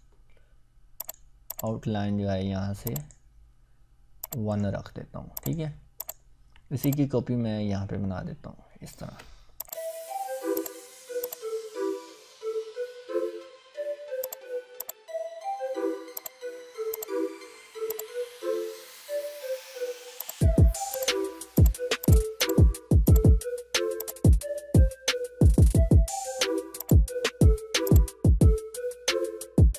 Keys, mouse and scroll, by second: 6.8-9.0 ctrl+drag, 13.0-14.1 scroll down 2, 14.2 click, 14.8-16.0 ctrl+drag, 16.2-16.5 drag, 23.1 click, 26.8-27.6 ctrl+shift+drag.